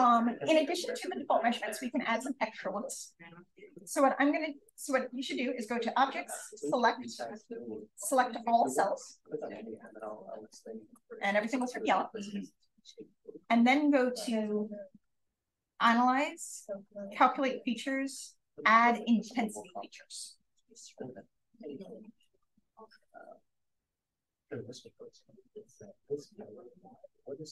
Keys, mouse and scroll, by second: 3.6 click.